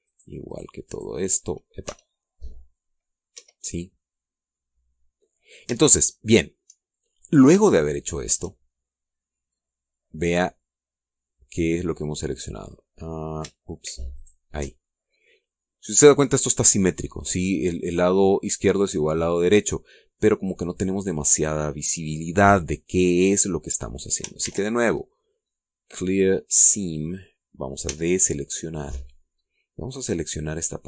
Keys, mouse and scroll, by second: 0.5 shift+right click, 0.9 shift+right click, 1.4 shift+right click, 1.7 shift+right click, 2.7 c, 3.7 middle click, 4.2 Escape, 4.5 scroll down 1, 4.8 middle click, 6.2-6.6 scroll up 1, 6.6 shift+middle click, 7.6 shift+scroll down 2, 7.9-9.3 shift+middle drag, 9.6 shift+scroll down 1, 10.1-14.3 middle drag, 15.0 alt+shift+right click, 15.7-17.0 alt+shift+middle drag, 22.3-22.6 scroll up 2, 22.8 scroll down 2, 25.3 ctrl+e, 27.0 click, 28.8 a, 29.1-30.2 middle drag, 30.2 scroll up 1.